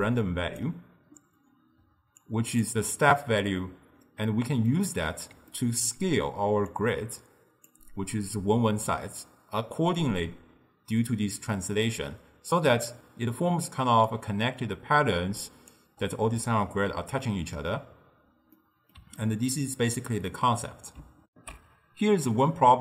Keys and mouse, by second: 0.6 d, 1.9 d, 2.2-2.7 drag, 2.7-3.8 d, 4.3-6.8 middle drag, 6.8 click, 12.8 d, 13.0-14.1 right drag, 14.1-15.8 typing, 15.2-15.8 drag, 17.0 d, 18.6-21.3 middle drag, 21.3 ctrl+alt+shift+w.